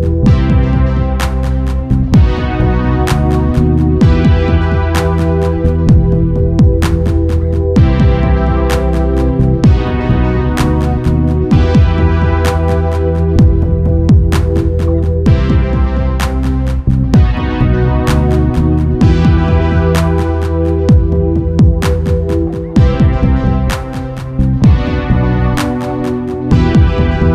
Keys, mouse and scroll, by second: 9.5-11.1 drag, 11.3 0, 19.3 r, 26.2 i.